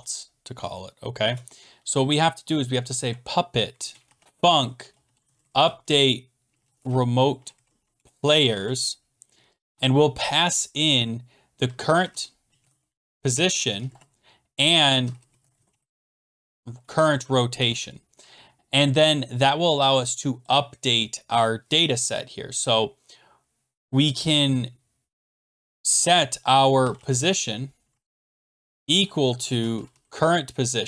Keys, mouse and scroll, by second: 2.4-10.2 typing, 11.4-18.1 typing, 19.4-20.2 typing, 20.4 click, 21.4 click, 26.5-30.4 typing.